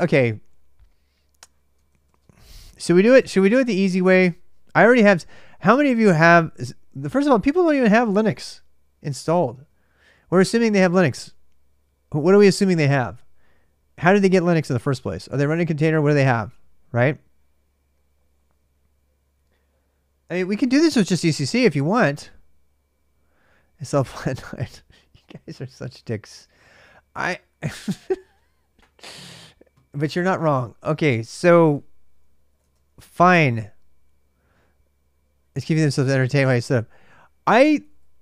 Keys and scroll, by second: 1.3-4.0 typing, 24.4 BackSpace, 33.0 typing.